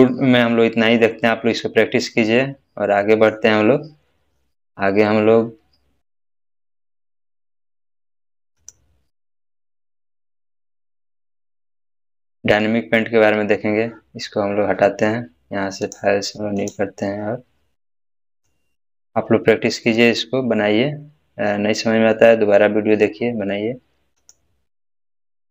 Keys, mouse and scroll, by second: 1.2 scroll down 1, 1.2-3.4 middle drag, 8.5 middle click, 8.6 click, 10.4 scroll up 1, 15.8 scroll up 1, 15.8 click, 24.2 click.